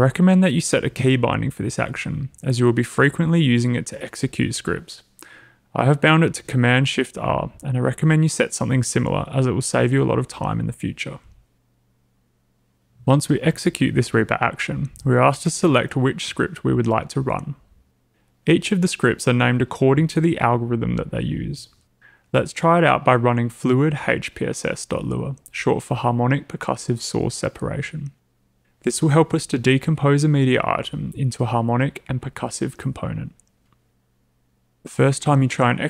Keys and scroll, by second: 8.5 typing.